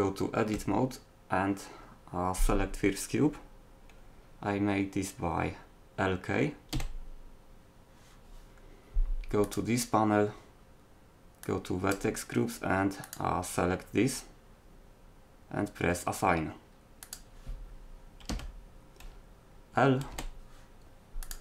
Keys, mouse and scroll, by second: 6.7 l, 9.5-11.3 drag, 14.1 click, 18.3 a, 20.1 l.